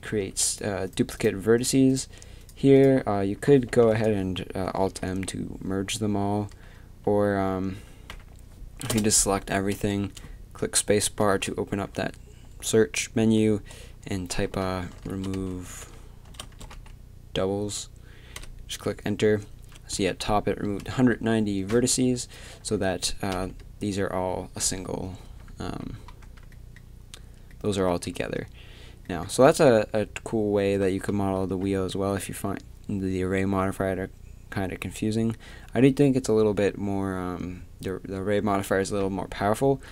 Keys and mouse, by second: 0.1 z, 3.0-4.9 drag, 3.7 b, 4.9 alt+m, 6.5 a, 7.0 z, 8.1 a, 8.9 space, 21.9 a, 22.2 right click, 22.6 a, 23.3 l, 25.2 a, 25.6 a, 26.2 a, 28.1 Tab, 29.3 Tab, 29.7 a, 31.4 a, 39.6 a.